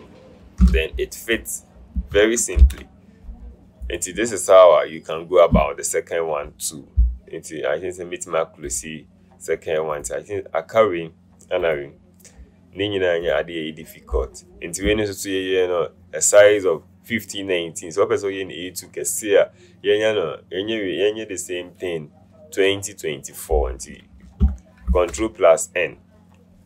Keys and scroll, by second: 0.7 v, 2.7 ctrl+0, 25.1 ctrl+n.